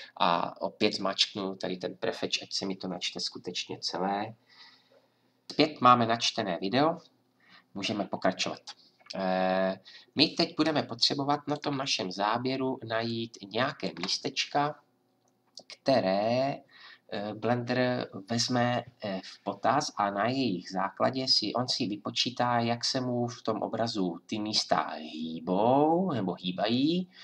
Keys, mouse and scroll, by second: 0.7-5.5 drag, 5.5 F10.